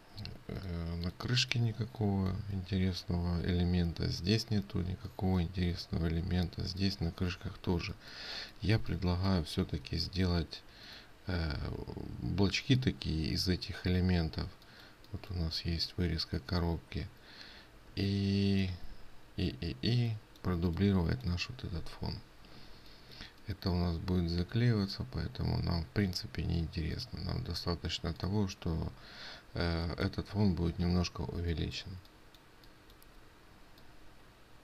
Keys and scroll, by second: 0.7 ctrl+space.